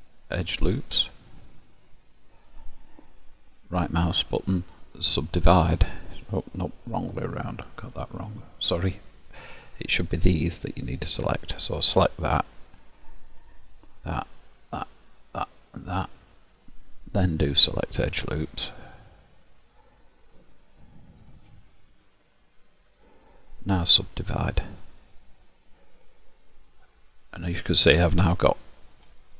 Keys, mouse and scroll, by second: 3.5 right click, 7.0 ctrl+z, 9.2 click, 13.9 shift+click, 14.7 shift+click, 15.4 shift+click, 15.9 shift+click, 19.7 click, 24.5 right click, 28.6 middle click.